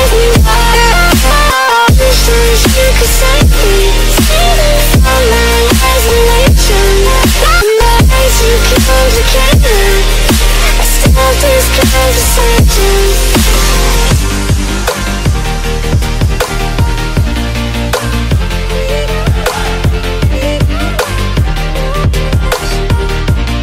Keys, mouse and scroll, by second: 2.2 click, 2.5 z, 2.8-3.3 middle click, 3.3 middle click, 4.2 click, 5.5 click, 6.0 5, 7.8 click, 8.8 click, 9.7 click, 9.9 middle click, 10.7 click, 12.5 shift+click, 13.4 click, 13.6 z, 14.2 click, 16.4 click, 17.1 click, 17.9 middle click, 18.0 middle click, 20.7 click, 21.1 middle click, 21.2 middle click, 21.7 middle click, 23.2 click.